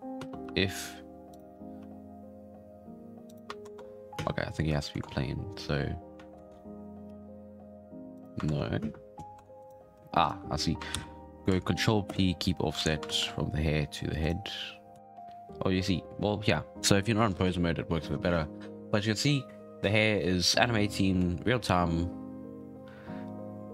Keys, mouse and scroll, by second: 0.1 space, 0.4 r, 1.5 scroll up 4, 1.7 r, 3.6 ctrl+Tab, 3.9 scroll down 3, 4.1 space, 4.9 shift+Left, 6.4 ctrl+Tab, 7.1 r, 8.5 ctrl+Tab, 8.7 scroll up 2, 8.8 space, 9.3 Tab, 9.6 right click, 9.7 scroll down 4, 10.2 shift+right click, 10.9 ctrl+p, 12.7 alt+a, 13.0 ctrl+Tab, 13.7-14.2 scroll down 1, 14.2 right click, 14.9 r, 14.9 g, 20.6-21.2 middle drag, 21.2 g.